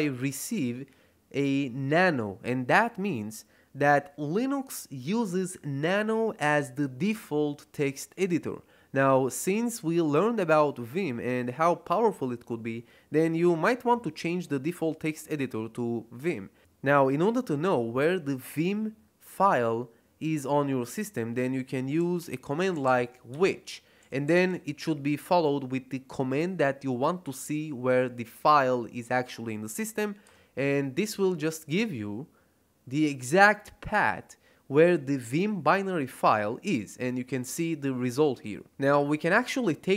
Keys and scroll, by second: 21.7-24.8 typing, 30.2 Return.